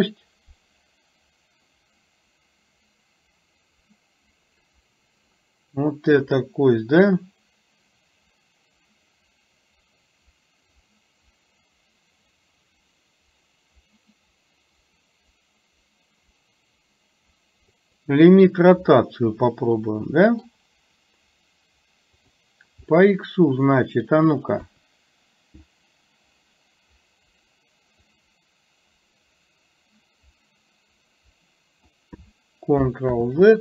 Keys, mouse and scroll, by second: 10.9-18.1 drag, 19.1-20.6 middle drag, 22.3 click, 22.9-24.2 middle drag, 24.8 KP_3, 28.2-32.1 drag.